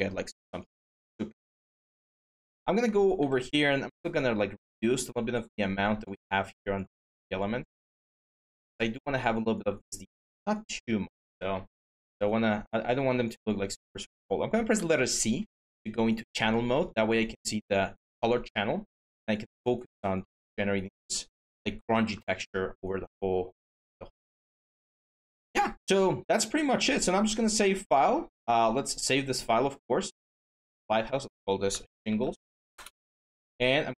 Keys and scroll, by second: 3.0 x, 14.5 c, 21.7 m, 31.4-32.9 typing.